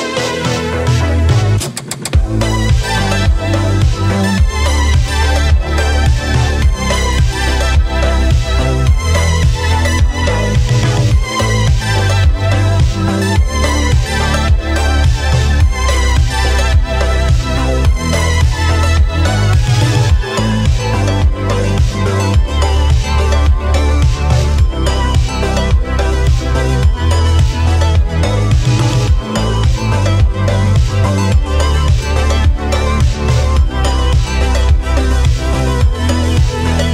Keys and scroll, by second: 8.3-10.0 typing, 11.8 ctrl+z.